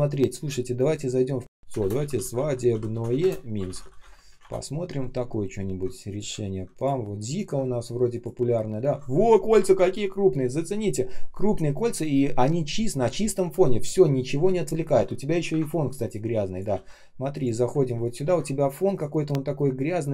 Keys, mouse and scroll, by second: 1.4-4.4 typing, 6.0 ctrl+click, 6.7 ctrl+click, 7.2 ctrl+click, 15.4 Print, 16.6 ctrl+c, 17.9 ctrl+click, 18.1 ctrl+м.